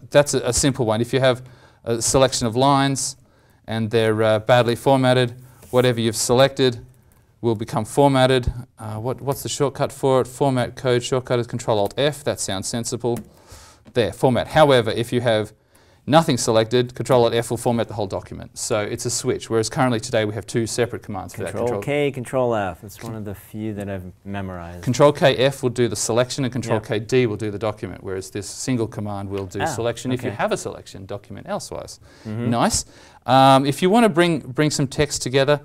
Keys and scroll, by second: 9.3 alt+Tab, 11.8 alt+Tab, 11.9 alt+Tab, 13.1 ctrl+alt+f, 14.4 ctrl+z, 17.1 ctrl+alt+f.